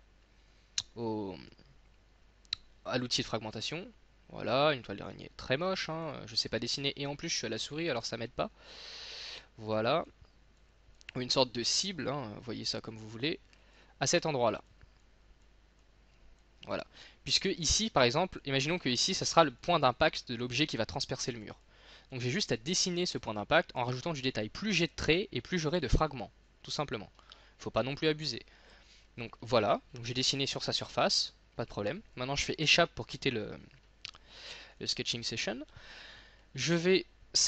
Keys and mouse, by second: 27.7 middle click, 34.8 middle click, 35.3 click.